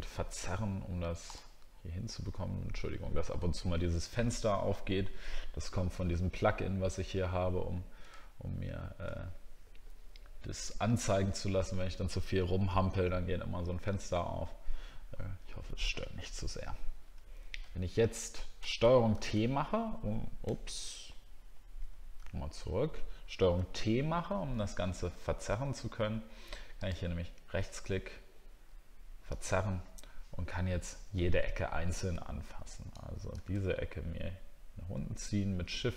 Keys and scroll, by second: 5.7 alt+scroll down 1, 8.1 alt+scroll up 1, 8.8 alt+scroll up 1, 31.2 alt+scroll up 1, 31.9 alt+scroll up 1.